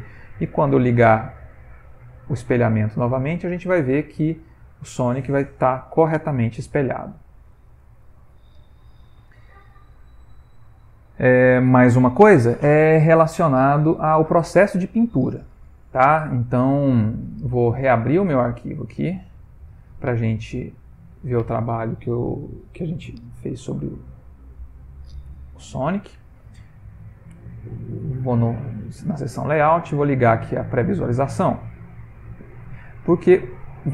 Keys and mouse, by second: 1.5 click, 2.3 ctrl+middle click, 2.8 middle click, 3.7 ctrl+middle click, 4.2 middle click, 5.1 middle click, 5.3 ctrl+middle click, 13.3 middle click, 15.7 middle click, 16.3 middle click, 17.8 click.